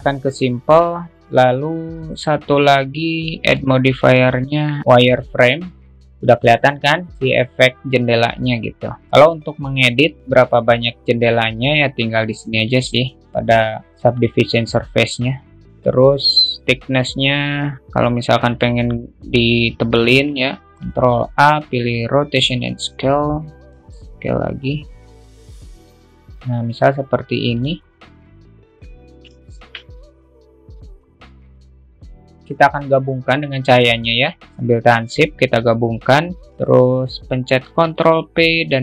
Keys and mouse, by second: 0.5 click, 4.0-6.0 drag, 15.2-19.8 drag, 21.2 ctrl+a, 24.2-28.0 drag, 28.8 alt+middle click, 30.0 alt+shift+middle click, 30.7-31.7 alt+middle drag, 32.9 alt+shift+middle click, 34.6 shift+click, 38.3 ctrl+p.